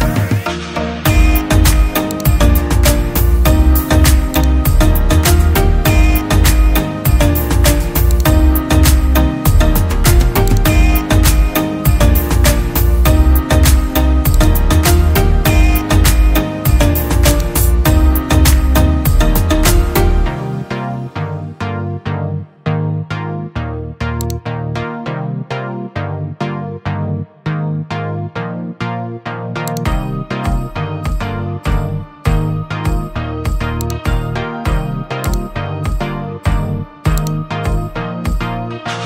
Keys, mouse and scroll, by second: 1.0 click, 1.4 click, 18.5 right click, 18.6-21.2 typing, 23.4-24.3 scroll down 1, 24.3 typing, 31.1-33.4 typing, 38.0-39.0 typing.